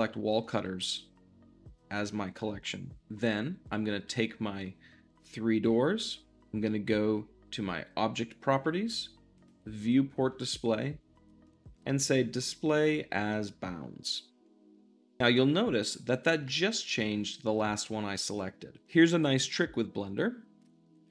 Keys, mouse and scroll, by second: 2.3-3.1 middle drag, 7.3-10.0 drag, 10.0-11.9 middle drag, 11.9-16.3 drag, 16.3-21.1 middle drag.